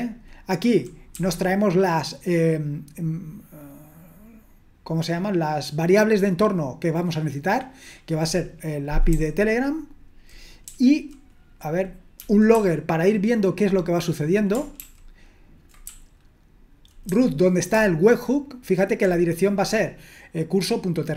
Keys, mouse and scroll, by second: 0.0-1.1 typing, 9.1-10.6 typing, 12.1-14.1 typing, 14.8 ctrl+d, 15.9-19.5 typing.